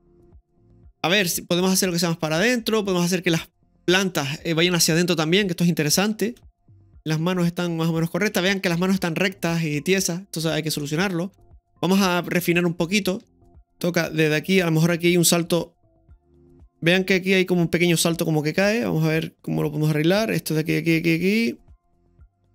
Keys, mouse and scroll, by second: 0.6 i, 0.8-1.3 scroll down 1, 6.4 space, 7.0-11.5 middle drag, 11.5 space, 12.3-12.6 shift+middle drag, 12.9-13.2 middle drag, 13.3 shift+middle click, 13.3 click, 18.7 space, 18.7-22.5 drag.